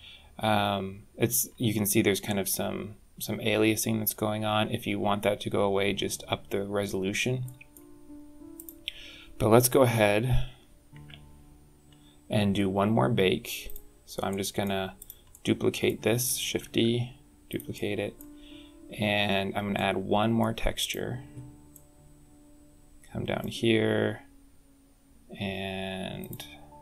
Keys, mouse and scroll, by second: 1.2-1.7 scroll up 2, 7.3 middle click, 8.4 click, 10.8 alt+h, 11.3-11.9 scroll down 9, 13.5 click, 14.1 middle click, 14.8 click, 15.1 middle click, 16.4 shift+d, 17.5 middle click, 19.6 middle click, 20.6 click, 21.6 middle click, 26.1 click.